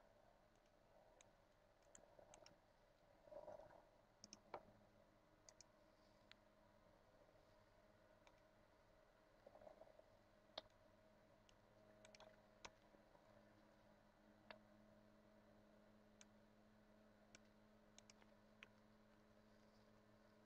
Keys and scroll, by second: 0.6 Tab, 1.6 BackSpace, 2.6 ctrl+s, 11.4 ctrl+c, 12.4 Return, 12.8 Tab, 13.3 ctrl+v, 17.1 Tab, 18.4 Return, 18.8-20.4 typing.